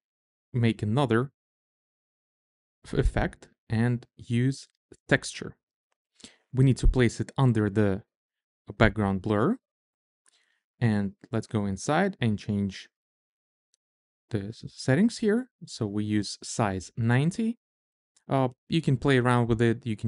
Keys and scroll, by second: 12.9 9, 13.2 0.